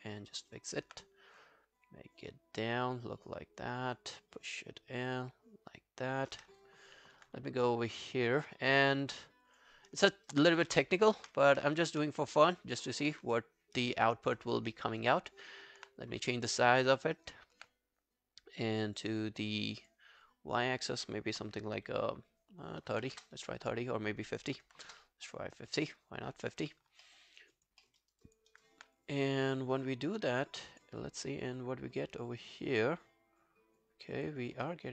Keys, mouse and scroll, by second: 0.0 alt+click, 0.4 alt+right click, 0.6 alt+click, 10.1 alt+middle click, 10.3 alt+right click, 10.7 ctrl+a, 11.8 ctrl+a, 13.9 alt+middle click, 14.2 alt+right click, 14.4 alt+click, 14.7 alt+middle click, 14.9 alt+right click, 15.2 alt+click, 17.0 alt+middle click, 17.2 alt+right click, 22.6-25.2 typing, 27.1 alt+middle click, 27.3 alt+right click, 27.6 alt+click, 27.8 alt+middle click, 28.0 alt+right click, 28.3 alt+click, 28.5 alt+right click, 34.8 alt+middle click.